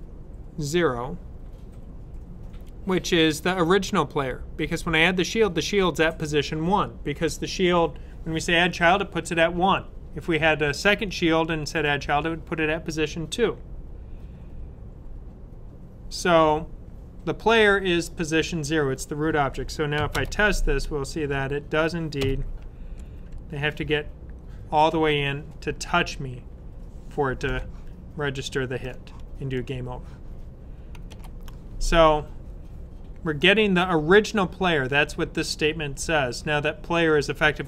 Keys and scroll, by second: 21.2 Up, 31.0 super+s.